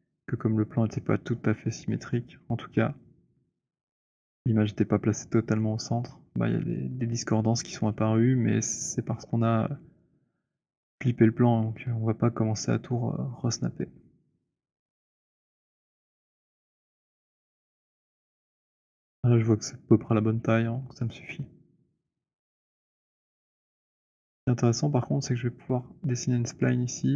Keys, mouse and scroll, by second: 14.8 click, 15.8-16.2 scroll, 16.6 alt+middle click, 17.0-17.6 alt+scroll, 17.9-18.3 alt+scroll, 21.4 middle click, 22.8 middle click, 24.0 alt+middle click.